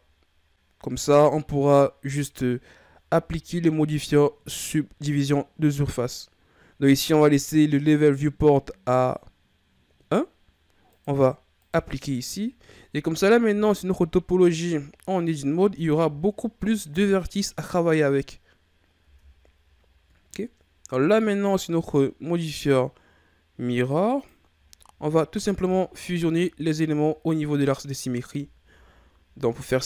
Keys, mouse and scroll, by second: 2.0-5.0 drag, 10.9-13.5 drag, 13.5 Tab, 14.5-16.8 scroll up 1, 16.8-17.5 scroll up 1, 19.0 Tab, 21.1-25.2 drag, 25.2 scroll up 2, 25.4 Tab, 26.6-27.5 scroll down 1, 27.5-29.7 scroll down 1.